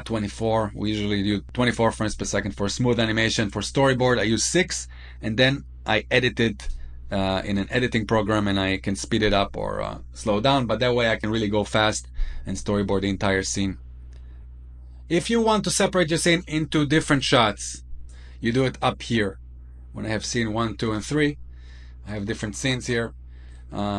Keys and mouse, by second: 19.3-21.1 drag.